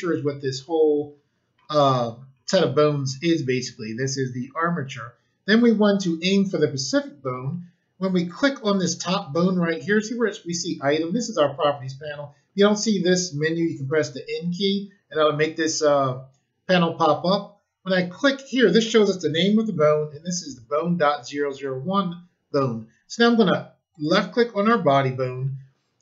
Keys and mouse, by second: 8.2 click, 23.8 click.